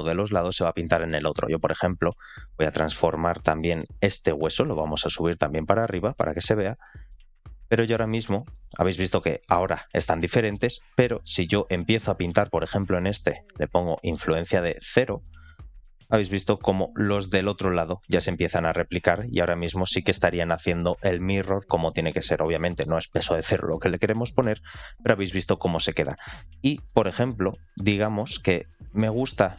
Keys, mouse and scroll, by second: 0.1-0.6 scroll up 2, 1.4 ctrl+click, 2.1 scroll down 1, 2.4 shift+middle drag, 4.1 ctrl+click, 4.9 click, 5.4 r, 8.4 shift+middle drag, 10.2 shift+middle click, 11.4 ctrl+click, 11.8-12.3 middle drag, 13.2 click, 15.3-16.3 drag, 17.2-21.4 drag, 21.7 middle click, 22.2 shift+middle click, 24.3 ctrl+z, 25.0 ctrl+z, 25.9 middle click, 26.6 shift+middle click, 27.6 middle click, 28.2 shift+middle click, 29.4 scroll up 1.